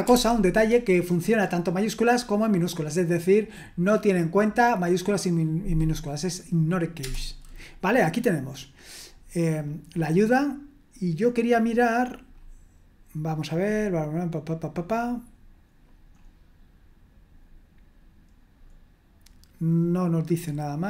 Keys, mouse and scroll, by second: 0.0-0.5 typing, 7.0 Return, 10.4-11.3 scroll up 1, 11.3-12.4 scroll up 1, 12.4-13.2 scroll up 1, 13.2-14.9 scroll up 1, 14.9-15.7 scroll up 1, 16.2-17.0 scroll up 2, 17.4-18.7 scroll down 2, 18.9-19.7 scroll down 2, 19.7-20.8 scroll down 1.